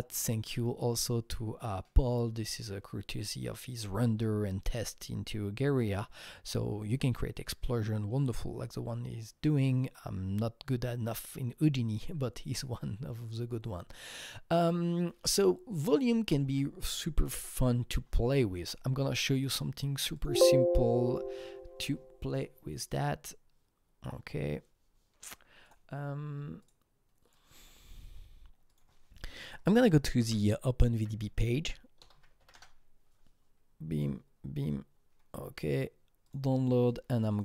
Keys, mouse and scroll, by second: 16.3 alt+Num_Lock, 16.4 alt+Tab, 19.2 click, 20.1 click, 21.1 click, 26.6 click, 27.3-32.0 drag, 29.5-32.0 typing, 32.5 Return, 33.9 click, 36.2 click, 36.9 click, 37.3 double click.